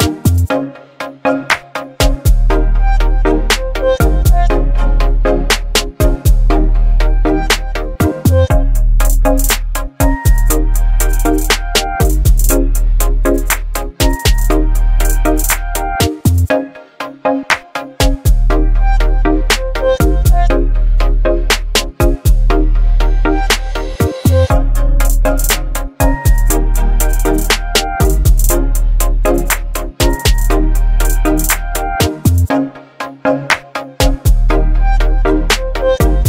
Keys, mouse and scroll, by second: 26.7 click, 30.6 click, 32.2 click.